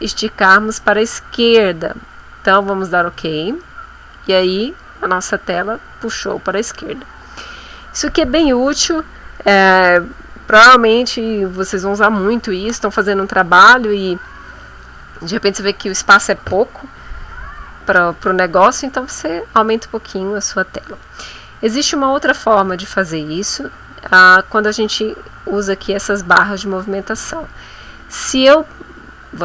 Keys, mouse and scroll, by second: 3.2 click, 20.7 click, 22.6 ctrl+z, 24.8-28.6 drag.